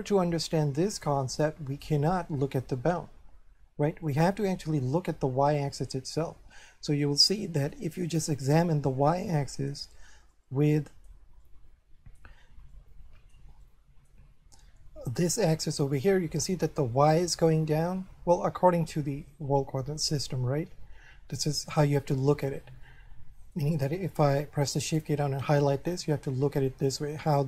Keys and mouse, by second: 1.4 shift+middle click, 4.1 middle click, 6.6 shift+middle click, 8.9 middle click, 10.3 middle click, 11.4 middle click, 12.7 middle click, 22.9 shift+middle click, 24.9 shift+right click, 25.7 middle click.